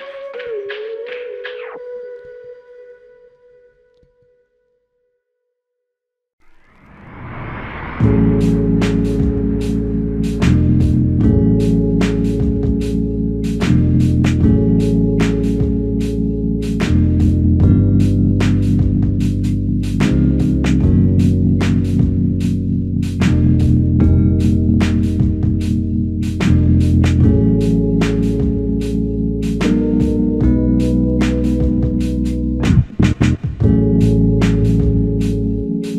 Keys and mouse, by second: 1.6 shift+click, 3.3 alt+shift+click, 5.4 shift+click, 6.8 alt+shift+click, 8.8 f, 10.4 alt+click, 12.2 shift+click, 16.0 shift+click, 17.8 alt+shift+click, 18.3 alt+click, 24.3 alt+click, 25.9 f, 26.7 alt+click, 29.2 double click, 32.0 double click, 32.1 shift+click, 34.7 shift+click.